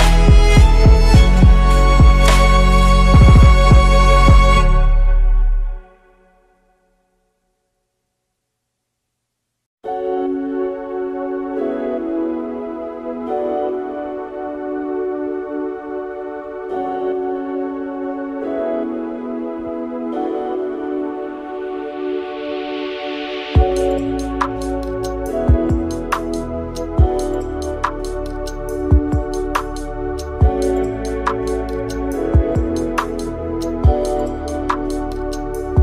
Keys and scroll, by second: 0.6 2, 0.7 Return, 0.7 2, 6.1 ctrl+x, 7.5 8, 7.7 F2, 9.5 5, 9.6 Return, 10.6 5, 10.7 Return, 12.1 typing, 12.2 Return, 16.2 typing, 16.4 Return, 17.7 typing, 17.8 Return, 21.4 2, 21.5 Return, 23.0 4, 23.1 Return, 26.5 Delete, 26.8 Tab, 32.7 Return, 32.7-34.3 typing.